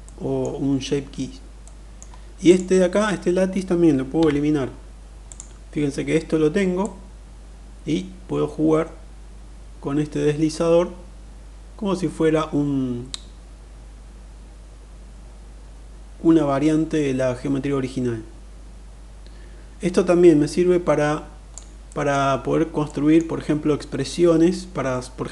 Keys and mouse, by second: 1.2-1.7 middle drag, 2.1 click, 3.8 Delete, 4.9 click, 6.6-21.2 drag, 21.4-21.8 middle drag, 22.5 middle click.